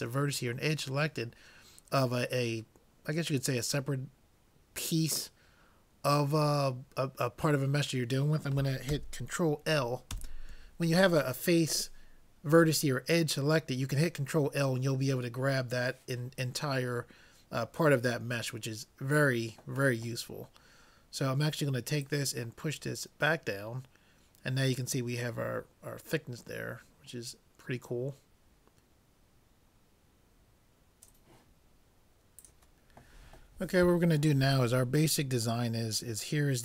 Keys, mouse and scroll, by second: 10.2 ctrl+l, 22.0-23.6 drag.